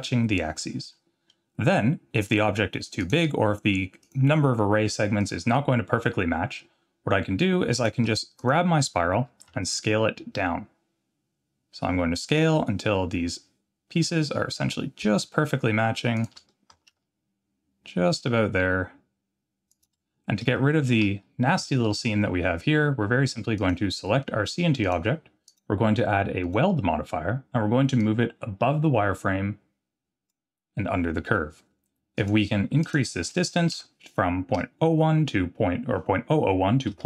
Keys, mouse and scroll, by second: 0.9-1.3 middle drag, 3.0 click, 4.0 click, 5.2 click, 7.8 click, 8.4 click, 9.1 s, 16.7 s, 20.1 scroll up 2, 20.6 shift+middle click, 21.2 scroll up 1, 21.6 shift+middle drag, 23.6 click, 24.8 click, 25.5-26.5 drag, 28.0-30.3 drag, 32.2-37.0 drag.